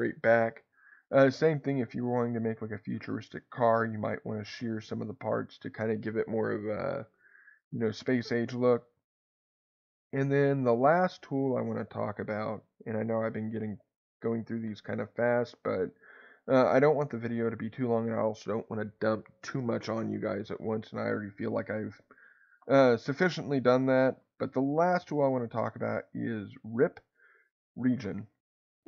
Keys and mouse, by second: 12.4 ctrl+z, 17.6 click, 28.7 click.